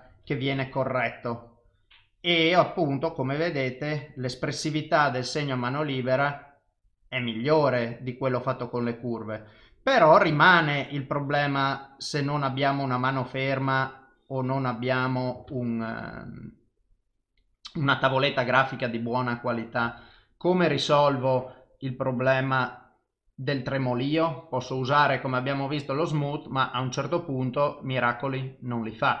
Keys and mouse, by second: 1.1 click, 3.3 click, 5.6 click, 6.7 click, 8.5 click, 10.3 ctrl+z, 11.0 click, 13.8 click, 15.5 ctrl+z, 16.6 click, 18.9 click, 19.9 ctrl+z, 22.1 click, 26.3 click, 27.5 click, 28.1 click, 28.7 click.